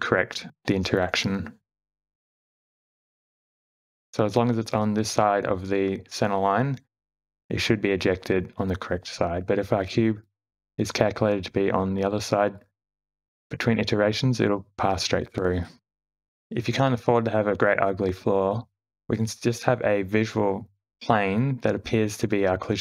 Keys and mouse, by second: 0.3-1.9 drag, 0.3-1.9 d, 2.4-3.0 shift+middle drag, 3.4-16.3 typing, 4.2-7.5 drag, 8.0 click, 9.4-10.1 drag, 10.6 click, 11.8-15.1 drag, 16.3 Tab, 16.3 shift+Left, 17.9 space, 20.1 click, 21.0 shift+d.